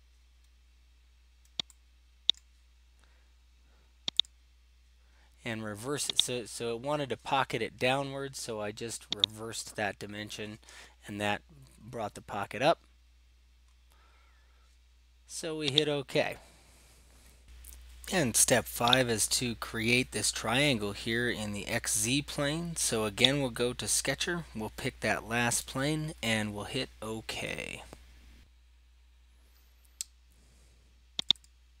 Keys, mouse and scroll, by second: 2.4 middle click, 2.5 right click, 4.2 click, 6.3 click, 9.3 click, 13.2 scroll, 13.4 scroll down 3, 13.7-14.4 scroll up 4, 14.4-15.3 scroll, 15.9 click, 19.0 click, 23.4 click, 28.4 click, 31.3 click, 31.5 click.